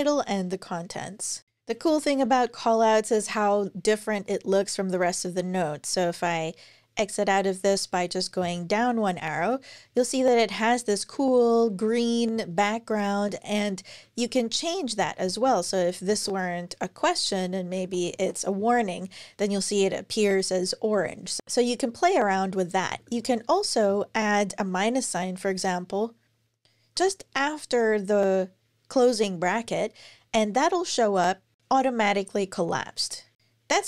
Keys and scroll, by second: 1.4 Up, 1.4 super+Right, 8.2 Down, 14.0 Up, 14.2 Up, 14.8 alt+Right, 15.0 alt+Right, 15.2 alt+Right, 15.4 alt+Right, 17.0 super+x, 17.2-18.4 typing, 20.4 typing, 21.4 Up, 22.7 alt+Right, 22.8 alt+Right, 23.0 alt+Right, 23.7 Right, 29.4 Up.